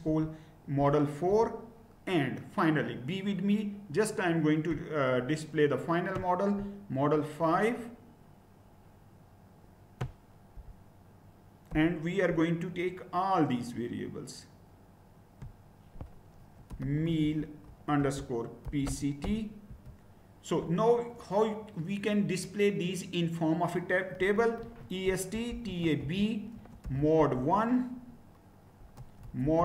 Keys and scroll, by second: 0.0 3, 0.1 BackSpace, 0.8 4, 1.3 Return, 10.6 typing, 11.7 5, 16.3-19.7 typing, 23.9-27.3 typing, 28.8-29.6 typing.